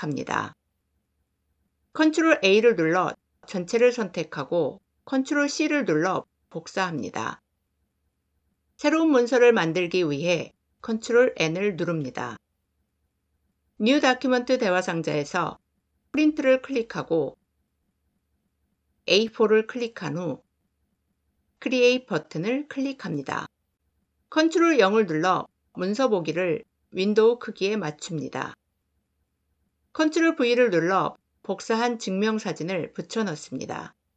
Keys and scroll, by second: 1.8 ctrl+a, 5.1 ctrl+c, 10.7 ctrl+n, 24.2 ctrl+0, 29.9 ctrl+v.